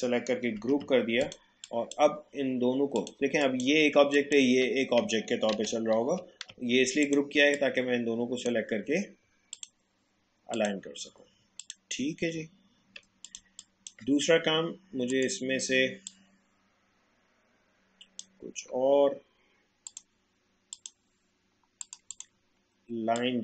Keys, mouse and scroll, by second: 0.6 ctrl+g, 1.2 click, 5.5 ctrl+z, 7.0-9.5 drag, 12.5 alt+scroll down 1, 13.2 click, 13.4 space, 13.6 click, 13.9 space, 15.1-23.4 drag.